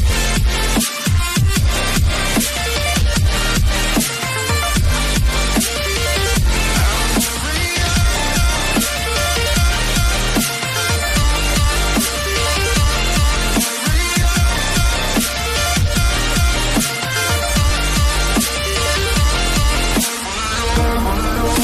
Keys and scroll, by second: 0.9 ctrl+d, 2.8 ctrl+z.